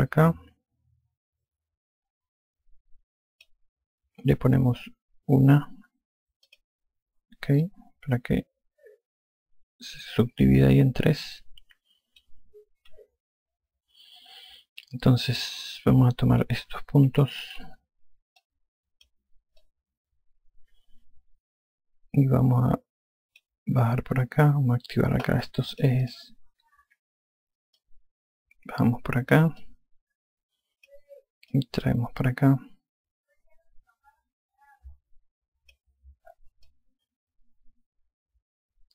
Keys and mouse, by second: 7.3 click, 8.5 alt+click, 15.7 alt+click, 18.0 5, 19.3 click, 20.5 alt+click, 26.6 click, 28.6 click, 30.5 alt+click, 32.4 click, 37.5 alt+click.